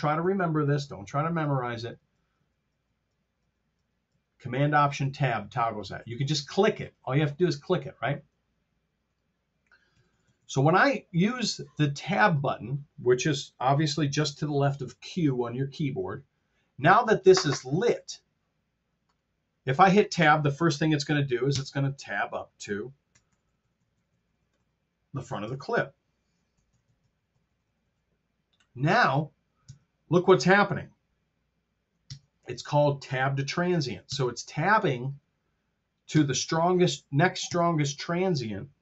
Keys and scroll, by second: 10.0 t, 21.5 Tab, 23.1 t, 25.3 Tab, 26.4 r, 29.5 Tab, 32.0 Tab, 34.1 Tab, 36.2 Tab, 37.4 Tab.